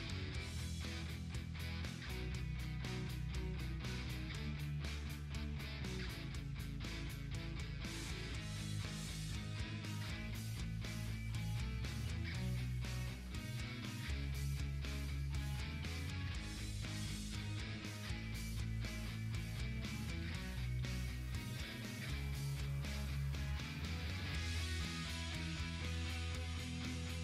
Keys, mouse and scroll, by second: 1.3 click, 3.0-8.7 drag, 8.7-11.2 drag, 14.8-18.5 drag, 20.2 click, 24.9 click.